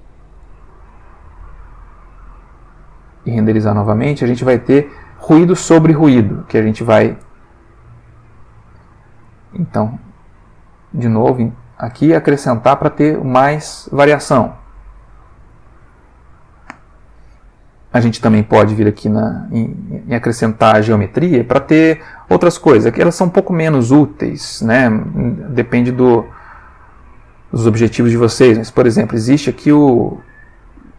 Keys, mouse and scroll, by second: 1.7 click, 2.7 F12, 6.4 click, 7.4-9.0 drag, 9.2 F12, 14.5 click, 15.7 click, 16.7 click, 18.1 click, 19.0 middle click, 21.2 middle click, 22.7 click, 29.9 click.